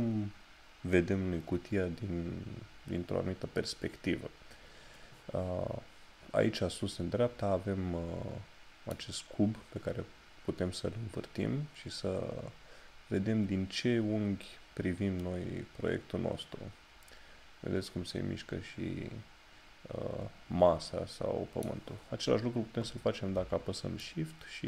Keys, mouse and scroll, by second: 11.1 click.